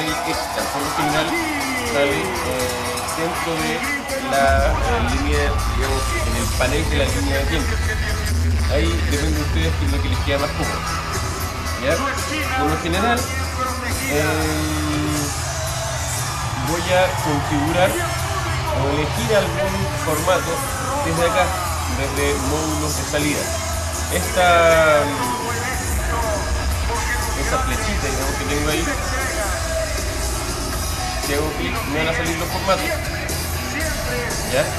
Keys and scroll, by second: 12.8 alt+super++, 25.7 alt+super+-.